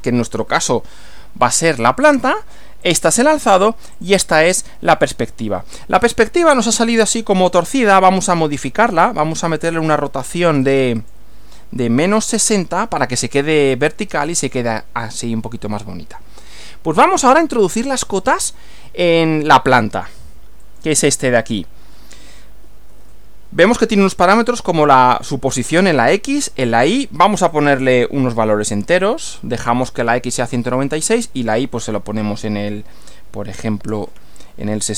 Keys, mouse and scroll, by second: 2.9 click, 4.0 click, 8.1-9.1 drag, 9.3 click, 10.5 click, 11.8-13.1 typing, 13.7 click, 20.6 click, 27.5 click, 34.5-34.9 typing.